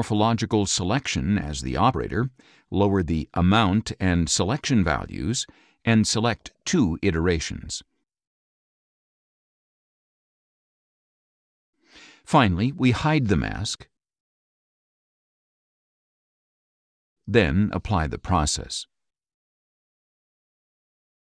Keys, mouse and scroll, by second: 14.8 click, 15.8-16.9 scroll up 6, 16.3 middle click, 16.8 middle click.